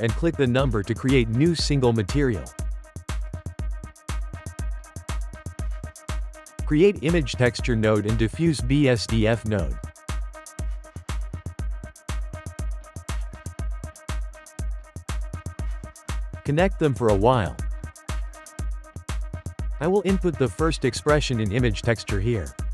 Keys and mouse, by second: 5.6 shift+a, 8.5 shift+a, 14.1 click, 14.2 g, 15.3-16.4 ctrl+middle drag, 16.4 click, 18.2 click, 19.3 shift+middle click, 19.9 click.